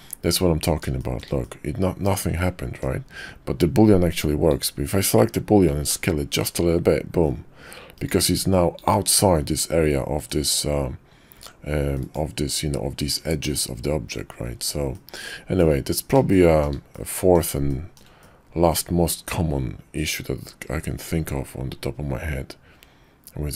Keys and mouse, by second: 0.3-0.6 middle drag, 1.0 shift+middle drag, 1.4-2.8 middle drag, 4.4 click, 5.6 s, 8.7 click, 8.9 Tab, 10.3 click, 11.3 Tab, 11.9 drag, 14.9-15.6 drag, 16.3 shift+middle click, 16.9-17.3 middle drag, 17.6-18.0 shift+middle drag, 18.2-23.5 middle drag.